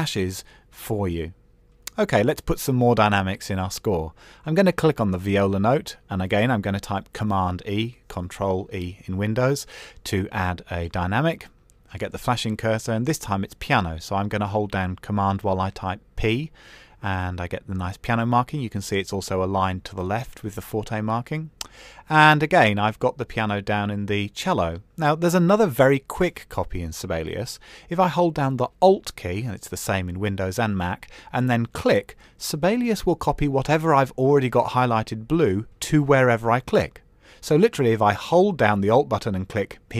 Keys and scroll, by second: 9.1 super+e, 13.7 super+p, 15.3 Escape.